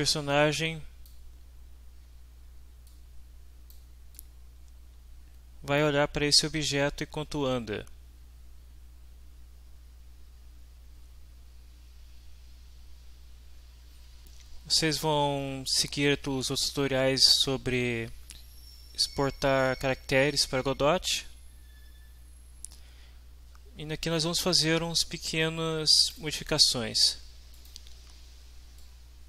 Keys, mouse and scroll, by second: 2.9-3.9 drag, 4.2-6.0 drag, 24.0 click, 26.1 click, 27.5 click, 28.8 click.